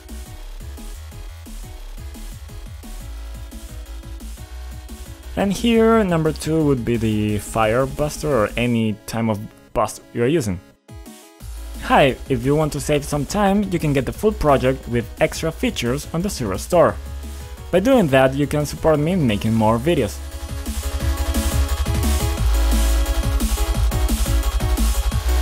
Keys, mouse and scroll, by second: 1.2 click, 7.8 click, 8.8 click, 10.0 click.